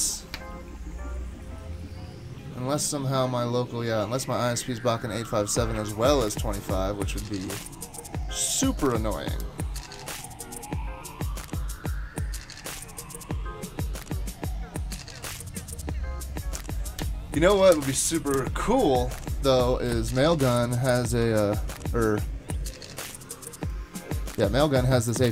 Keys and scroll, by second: 20.4 ctrl+c, 21.2 super+Tab.